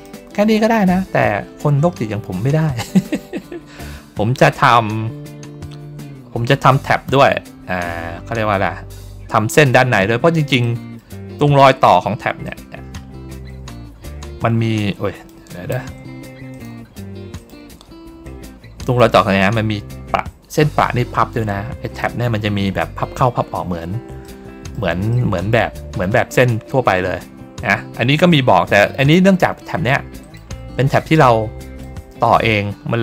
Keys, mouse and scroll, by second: 0.6 ctrl+scroll up 1, 3.2-3.8 ctrl+scroll up 1, 4.4-5.0 ctrl+scroll down 2, 7.1 ctrl+middle click, 7.9 ctrl+scroll down 1, 10.5 middle click, 11.2 ctrl+scroll down 1, 12.3 click, 13.0 ctrl+middle click, 13.9-15.2 drag, 16.4 click, 17.2 ctrl+click, 18.1 click, 19.3 ctrl+scroll down 1, 21.0-21.4 ctrl+scroll down 1, 24.1 middle click, 25.0 middle click, 27.3 ctrl+middle click, 28.9 click, 30.1 ctrl+click, 31.1 click.